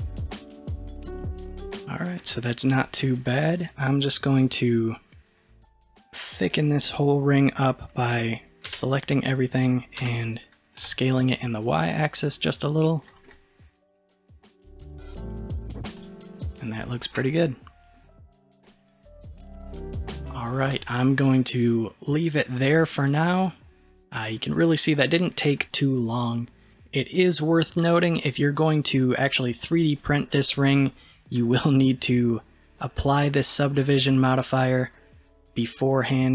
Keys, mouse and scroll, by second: 2.4-8.7 shift+middle drag, 8.7 a, 10.0 s, 13.3-16.0 middle drag, 16.0 click, 16.4-16.8 scroll down 2, 16.8-19.8 shift+middle drag, 19.8-21.0 scroll down 1, 21.0-22.9 scroll down 1, 23.4-23.9 middle drag, 26.3-27.5 scroll up 1, 27.5-28.2 scroll down 1, 30.4-33.4 middle drag, 36.0-36.3 middle drag.